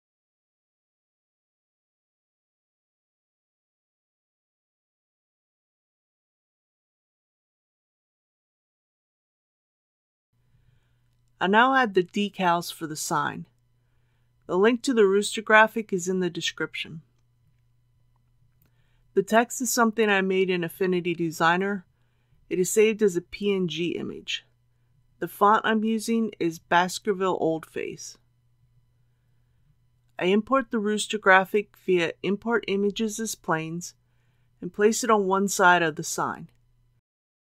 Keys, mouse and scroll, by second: 1.0 scroll up 1, 2.8-4.1 middle drag, 10.3 middle click, 11.7 scroll down 1, 13.7 KP_3, 17.9 click, 25.5-29.2 drag.